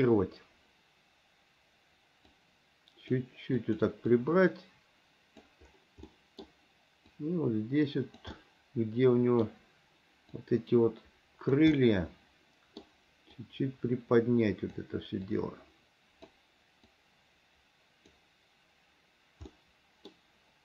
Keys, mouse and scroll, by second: 2.5 click, 3.8 click, 4.3-5.7 drag, 6.3 middle click, 7.3-8.4 drag, 8.5-9.7 middle drag, 10.6-11.8 drag, 12.0-13.0 middle drag, 13.6-15.0 drag, 15.5-16.5 drag, 17.1-18.3 drag, 19.7 middle click.